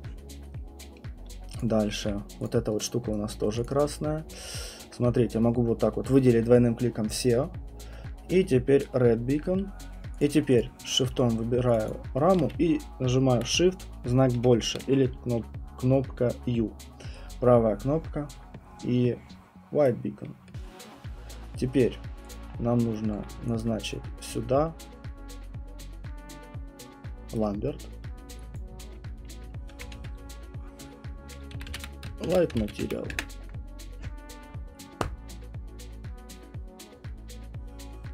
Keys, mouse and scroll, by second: 0.5 middle click, 2.4 click, 3.1 right click, 3.6 click, 3.8 click, 4.1 alt+click, 4.1 middle click, 4.2 alt+middle click, 4.5 alt+middle click, 4.8-9.7 alt+middle click, 5.0 middle click, 8.8 right click, 9.2 middle click, 9.4 middle click, 10.2 click, 10.6 click, 11.7 shift+click, 11.8 shift+click, 11.9 shift+click, 19.8 right click, 22.3 click, 22.5 scroll, 23.2 alt+middle click, 23.6 alt+click, 27.3 alt+middle click, 27.4 right click, 28.6 click, 29.5-33.6 typing, 36.9 typing.